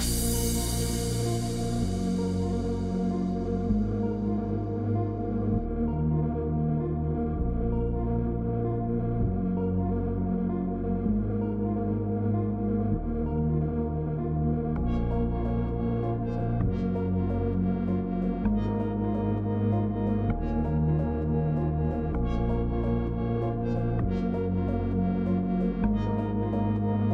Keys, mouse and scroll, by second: 0.0-27.1 typing, 1.1 click, 3.5 middle click, 5.1 Escape, 8.7 click, 9.5 Escape, 10.6 click, 11.7 click, 14.3 click.